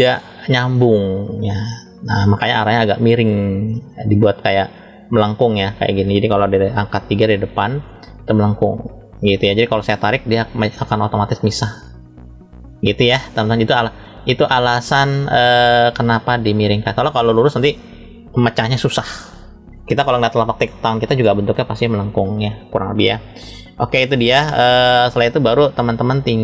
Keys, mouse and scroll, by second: 1.3 middle click, 3.6 shift+middle click, 4.7 middle click, 6.3 KP_3, 9.8 click, 10.0 click, 14.2 click.